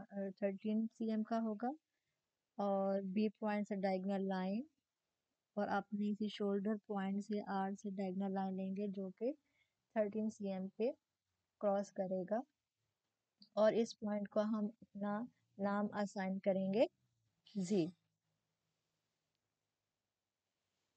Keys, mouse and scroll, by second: 2.4 click, 2.4-7.7 drag, 9.5-12.7 drag, 9.5 typing, 14.4 click, 14.4 typing, 18.0 shift+click, 18.0 typing, 20.4 typing.